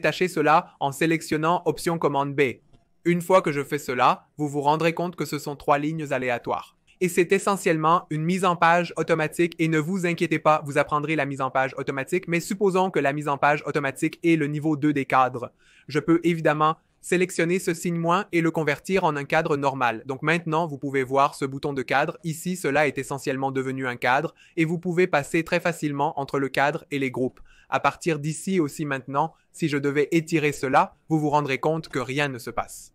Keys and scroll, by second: 27.6 v, 31.2 super+z.